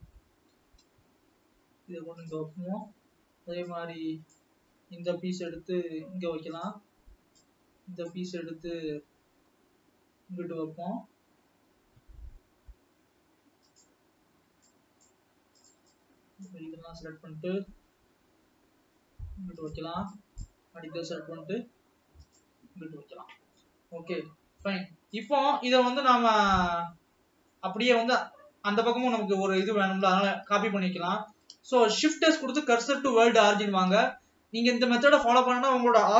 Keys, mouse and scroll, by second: 0.9 g, 2.7-4.5 middle drag, 4.5 click, 5.8 g, 8.4 click, 9.5 g, 15.7-16.6 drag, 18.0 g, 20.5 click, 21.4 g, 22.7-23.6 scroll down 2, 23.6 middle click, 24.3 alt+a, 25.3 click, 26.1-27.1 scroll down 8, 27.1-28.4 middle drag, 28.4 scroll down 1, 28.8-30.7 middle drag, 30.7 Tab, 31.3 Tab, 31.5-33.3 scroll down 1, 33.3 shift+s, 34.0 alt+a, 35.4 click.